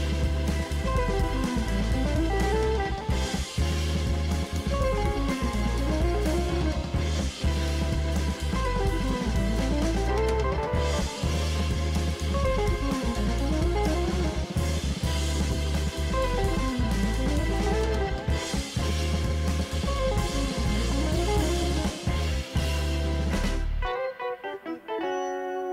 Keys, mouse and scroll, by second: 0.8 alt+scroll down 1, 20.8 f.